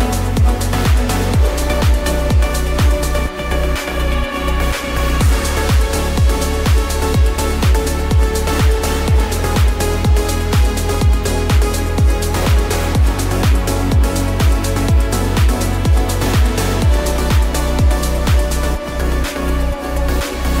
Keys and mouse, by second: 0.7 KP_9, 0.8 KP_0, 2.3 Return, 3.6-5.1 middle drag, 5.7 s, 7.3-7.7 drag, 7.7-8.5 middle drag, 9.5 s, 10.8 x, 13.1-13.5 drag, 13.5-15.2 middle drag, 15.8-16.3 shift+middle drag, 17.5 g, 18.2 x, 19.8 y.